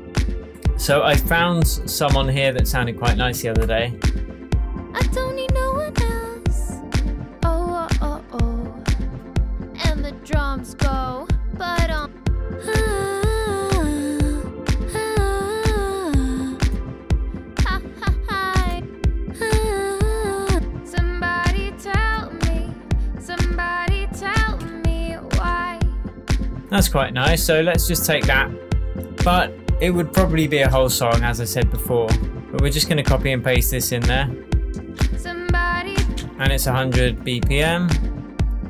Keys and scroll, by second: 34.7 space, 36.0 space.